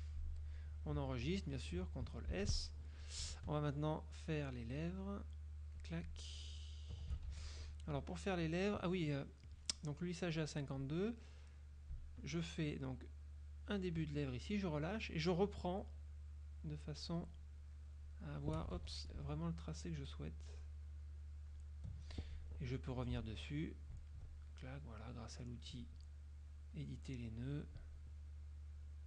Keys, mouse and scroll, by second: 2.4 ctrl+s, 4.2-6.0 shift+drag, 7.4 ctrl+shift+z, 12.5-14.3 shift+drag, 16.2-17.3 shift+drag, 17.5 shift+click, 18.1 shift+click, 18.9 ctrl+shift+z, 19.5-20.2 shift+drag, 20.6-21.8 shift+drag, 23.0 F2, 24.1 ctrl+click, 24.7 ctrl+click, 26.6 click, 27.4 click, 28.8 click.